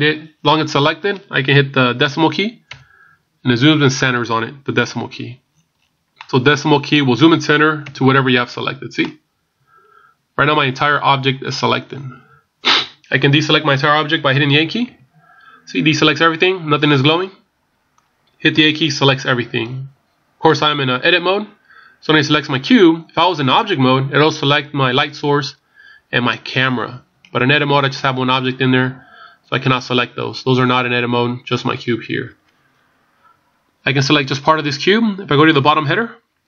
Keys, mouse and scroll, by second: 2.6 KP_Decimal, 5.5 scroll down 4, 6.2 middle click, 6.2 scroll down 11, 6.8 scroll down 1, 7.8 KP_Decimal, 9.0 middle click, 11.8 scroll down 1, 12.5 scroll down 5, 14.8 a, 16.0 middle click, 18.6 a, 20.3 scroll down 2, 26.3 scroll down 2, 31.5-32.1 scroll up 1.